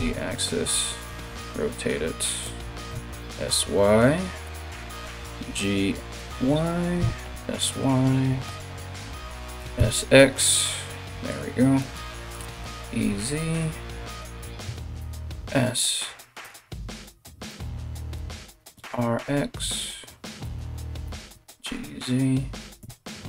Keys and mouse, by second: 0.6 r, 2.5 s, 4.3 g, 6.6 s, 8.0 KP_1, 9.1 s, 11.9 e, 14.6 s, 17.1 r, 18.1 r, 20.6 g.